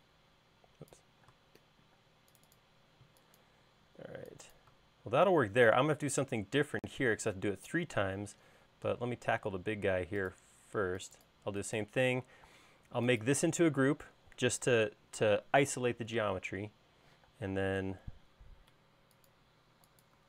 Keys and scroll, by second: 1.8 alt+space, 2.5 alt+space, 9.2 space, 17.7 q, 19.2 Up.